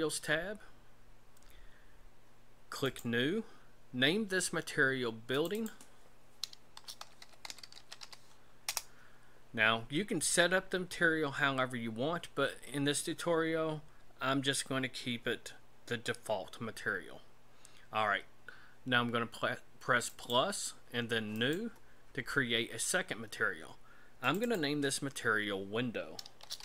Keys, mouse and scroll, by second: 2.8 click, 5.3 click, 5.5 click, 20.1 click, 21.3 click.